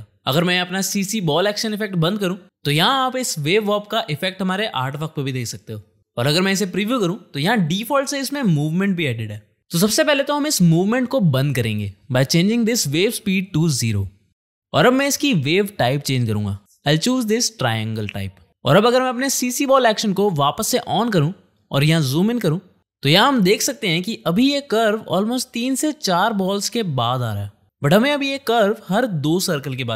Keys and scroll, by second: 13.8 KP_0, 14.2 Return, 22.4 space.